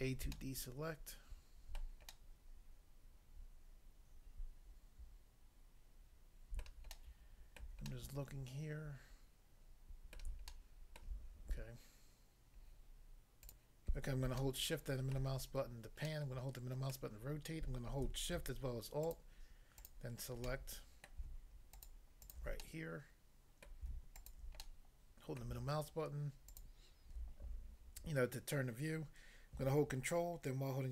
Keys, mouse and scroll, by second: 0.4 shift+middle click, 7.0 shift+middle click, 10.1 middle click, 10.5 shift+middle click, 13.4 click, 13.6 click, 14.4 shift+middle click, 16.9 middle click, 19.1 alt+click, 19.2 alt+click, 19.7 alt+click, 19.9 alt+click, 20.5 middle click, 21.1 middle click, 21.7 alt+click, 22.3 alt+double click, 22.6 middle click, 23.7 middle click, 24.2 alt+click, 24.6 middle click, 25.5 middle click, 26.5 alt+click.